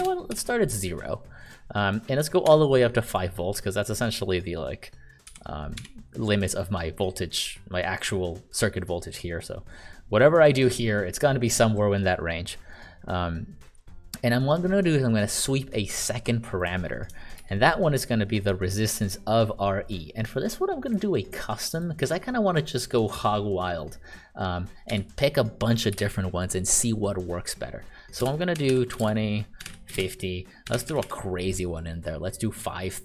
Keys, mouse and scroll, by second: 0.3 0, 2.4 5, 5.7 1, 17.3 shift+r, 18.4 click, 24.8 1, 25.9 ,, 28.0-30.7 typing, 32.3-33.0 typing.